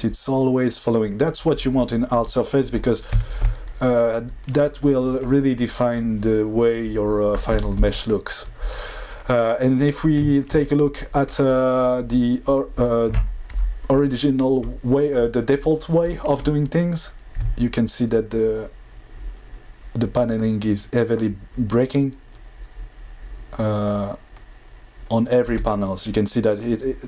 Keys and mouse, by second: 12.4 click.